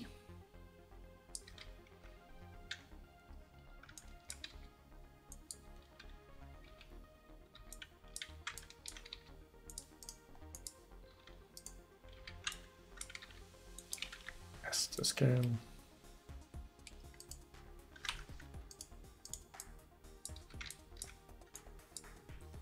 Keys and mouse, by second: 1.4 click, 1.5 a, 4.6 g, 6.7 a, 7.6 g, 9.2 g, 12.2 a, 13.3 g, 14.2 s, 17.2 right click, 20.4 a, 21.0 click, 22.3-22.6 drag.